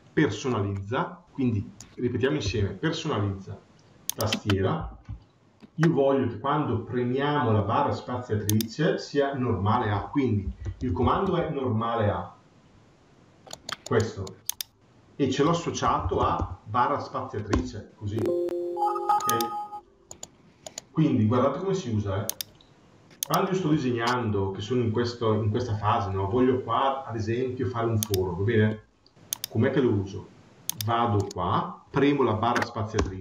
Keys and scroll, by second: 15.7 BackSpace.